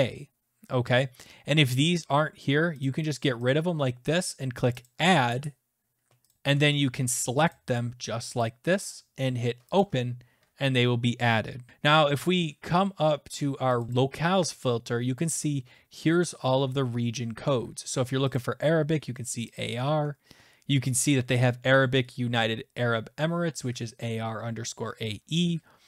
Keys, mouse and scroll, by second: 2.8 click, 3.1 click, 3.5 click, 4.8 click, 6.3 click, 7.5 ctrl+click, 8.4 ctrl+click, 9.8 click, 13.8 click, 13.9 click, 16.4-17.5 scroll, 17.5-17.8 scroll, 18.3 click, 19.5 click, 20.2-22.5 scroll.